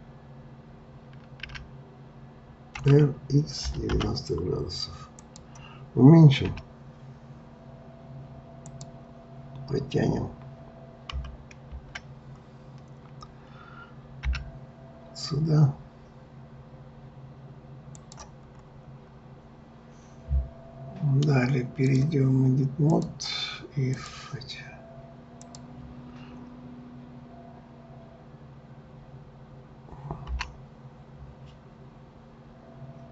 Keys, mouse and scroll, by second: 1.4 r, 6.5 s, 14.2 g, 18.6-19.1 scroll, 21.8-24.0 drag, 25.4 click, 30.3 g.